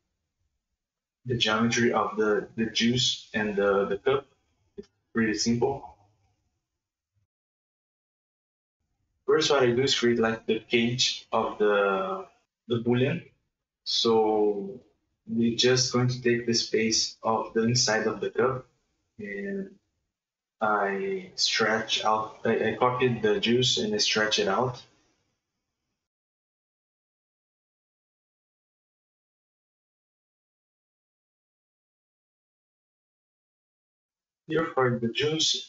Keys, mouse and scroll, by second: 0.5-1.8 middle drag, 1.8 Tab, 2.2 right click, 2.5 Tab, 3.1-4.5 middle drag, 4.5 click, 5.0-6.1 middle drag, 6.1 Tab, 6.6-7.0 middle drag, 7.0 right click, 7.8 shift+d, 8.4 click, 10.0-10.7 middle drag, 10.7 shift+space, 11.6 Tab, 11.7 middle click, 12.6 Tab, 12.9 click, 13.3 Tab, 13.8 right click, 13.9 scroll up 1, 15.2 middle click, 15.4 shift+space, 15.9 shift+middle click, 17.2 middle click, 17.5 click, 17.6 middle click, 17.7 KP_1, 18.0 scroll down 1, 18.2-19.3 drag, 19.5 shift+space, 20.0 middle click, 20.4 alt+s, 21.2 ctrl+z, 21.4 s, 21.8 KP_1, 22.1 s, 23.0 shift+middle click, 23.2 scroll up 4, 23.4 Tab, 23.6 right click, 23.6 c, 24.2 s, 24.9-26.0 drag, 26.3 shift+space, 26.7 click, 27.1 scroll down 2, 27.2 shift+middle click, 27.3 Tab, 27.4 middle click, 27.9 click, 28.5 click, 28.8-29.8 shift+middle drag, 29.8-30.3 drag, 30.6 scroll up 2, 30.8 Tab, 33.3 click, 33.8 shift+middle click, 34.6 alt+right click, 34.9 KP_1, 35.1-35.5 scroll up 2, 35.5 alt+shift+right click.